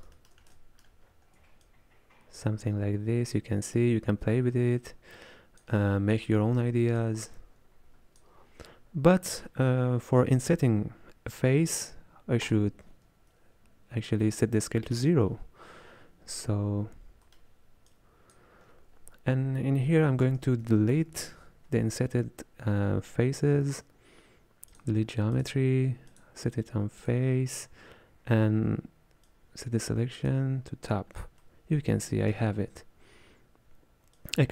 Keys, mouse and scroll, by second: 2.0-4.7 shift+drag, 6.1 scroll down 1, 6.3 middle click, 7.0-24.8 ctrl+drag, 27.1-30.3 drag, 31.4-34.5 middle drag.